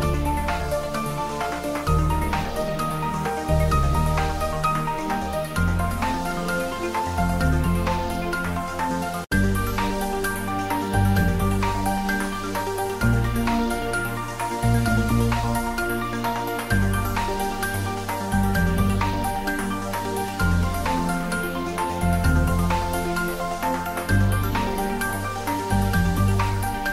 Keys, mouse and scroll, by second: 1.3 click, 1.4 s, 2.1 click, 2.4 g, 4.5 click, 4.7 s, 5.4 click, 5.7 g, 6.1 Down, 6.5 click, 8.8 click, 11.8 click, 14.4 click, 17.7 click, 19.5 click, 26.7 Tab.